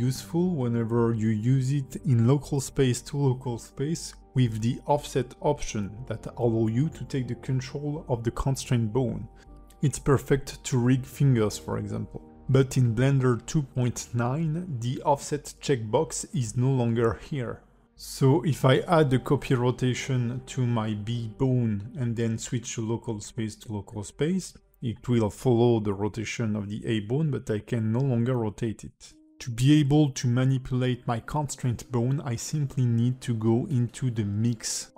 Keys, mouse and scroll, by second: 14.6 ctrl+alt+c, 14.6 click, 14.9 click, 15.7 click, 16.5 shift+click, 17.0 ctrl+shift+c, 19.7 click, 22.4 click, 24.5 click, 25.3 r, 26.9 click, 27.3 r, 28.9 alt+middle click, 32.3 click, 33.5 click.